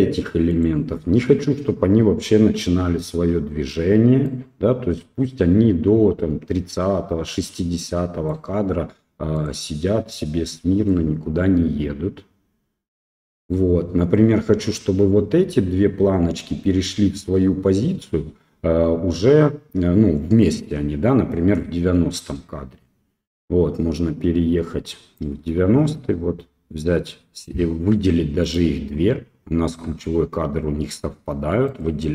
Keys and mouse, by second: 0.5 right click, 4.2-8.3 right drag, 9.3 right click, 10.9-13.5 right drag, 20.4-25.1 right drag, 28.4 shift+click, 31.7 click.